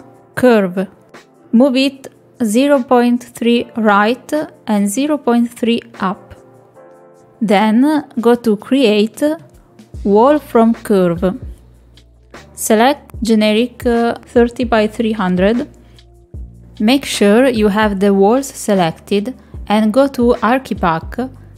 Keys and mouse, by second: 0.7-3.2 drag, 4.0-6.0 drag, 7.6 click, 16.9 middle click, 18.7 click.